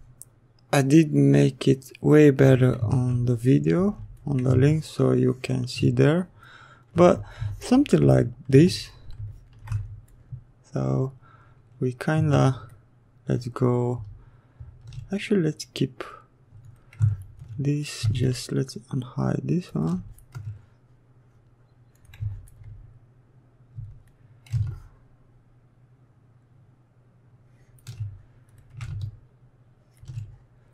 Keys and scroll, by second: 2.9 ctrl+w.